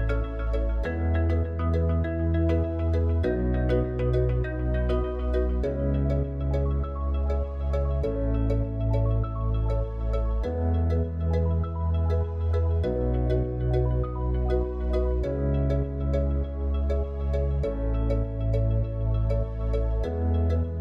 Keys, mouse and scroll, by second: 3.6 click, 9.3 click, 14.4 click, 20.1-20.8 drag.